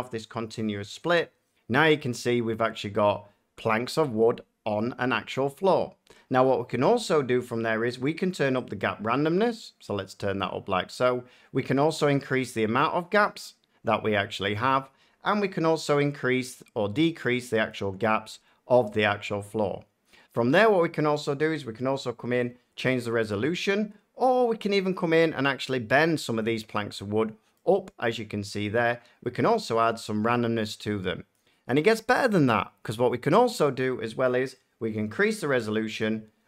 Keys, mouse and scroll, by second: 1.2-1.8 drag, 1.9 drag, 2.6 middle click, 10.3 click, 13.1-15.2 drag, 17.6-19.8 drag, 26.3 click, 27.5 middle click, 31.3 click, 33.3 middle click, 35.9 click.